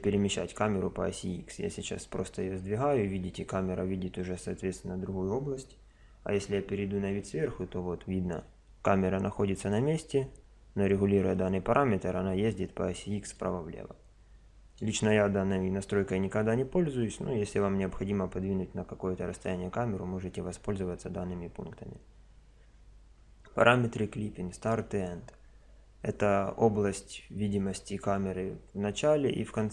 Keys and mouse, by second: 1.2-2.5 middle drag, 2.5 click, 2.9 middle click, 2.9 click, 3.0 middle click, 6.4 KP_7, 8.4 click, 13.2 click, 17.8 KP_0.